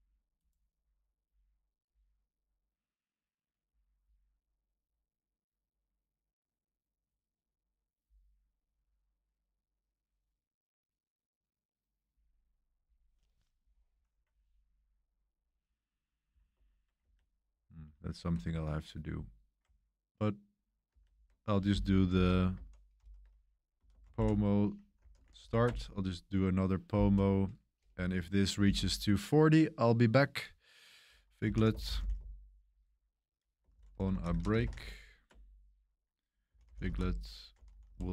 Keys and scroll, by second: 16.5 super+1, 17.0 super+3, 17.6 super+1, 17.9 super+1, 17.9 super+3, 20.9 super+3, 22.1 ctrl+c, 22.9 ctrl+l, 23.5-25.8 typing, 31.1-38.1 typing.